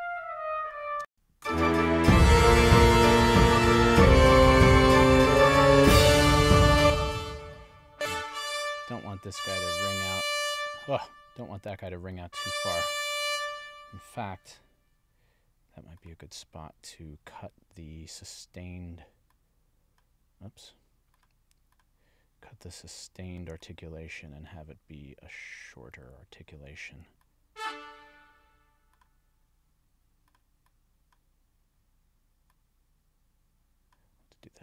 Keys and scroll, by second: 1.1 space, 6.8 space.